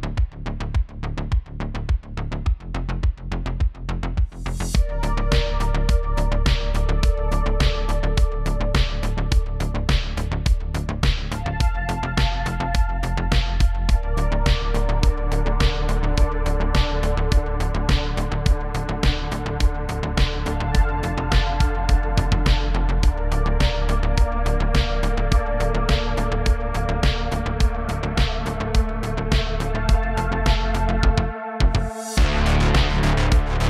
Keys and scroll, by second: 17.6 space, 17.7 space, 17.7 space, 20.8 typing, 22.5 typing, 24.3 d, 24.7 shift+f, 26.4 shift+f, 26.7 shift+d, 29.3 space, 29.3 space, 31.9 super+z.